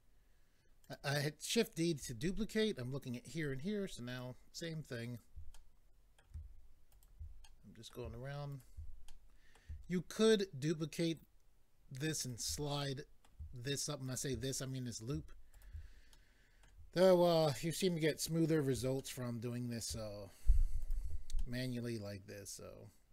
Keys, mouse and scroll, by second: 0.8 click, 4.1 ctrl+right click, 5.0 ctrl+right click, 5.5 middle click, 6.9 ctrl+right click, 7.4 middle click, 8.5 ctrl+right click, 9.1 middle click, 11.0 ctrl+right click, 12.2 ctrl+right click, 12.8 middle click, 14.1 ctrl+right click, 15.4 ctrl+right click, 16.1 middle click, 18.5 ctrl+right click, 19.0 middle click, 20.8 ctrl+right click, 21.4 middle click.